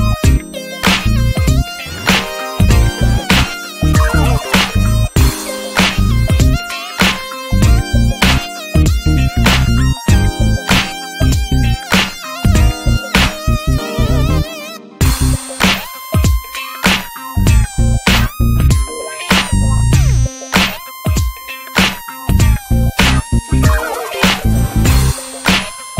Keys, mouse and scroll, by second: 0.4-1.1 scroll down 2, 0.6 alt+z, 1.5 ctrl+1, 2.7 click, 3.0 ctrl+s, 3.7-4.8 drag, 6.4-6.7 scroll down 5, 6.7 alt+z, 7.0 shift+middle click, 7.1 scroll up 1, 7.3-7.7 middle drag, 7.7 ctrl+s, 8.0 click, 8.4 middle click, 8.7 alt+z, 8.8 middle click, 9.1 alt+z, 9.6-10.7 drag, 11.2 click, 11.5 Tab, 11.7 alt+middle click, 11.9 alt+middle click, 12.2 Tab, 12.5 click, 12.6 middle click, 12.8 scroll up 2, 13.0 Tab, 13.6 alt+z, 13.8 middle click, 14.2 click, 14.4 Tab, 14.7 middle click, 14.9 alt+z, 15.1 drag, 15.3 middle click, 15.5 ctrl+s, 16.1-17.3 drag, 17.3 middle click, 17.4 scroll down 2, 17.6 alt+z, 18.0 alt+middle click, 18.4 ctrl+s, 19.2 click, 19.8 Tab, 19.9-20.3 middle drag, 20.3 drag, 20.5 scroll up 4, 20.8 alt+z, 21.0 middle click, 21.5 click, 22.0 Tab, 22.1 scroll down 4, 22.3 middle click, 22.6 click, 22.8 Tab, 23.1 middle click, 23.3-23.8 scroll up 4, 23.8 alt+middle click, 24.1 alt+middle click, 24.6-25.9 drag.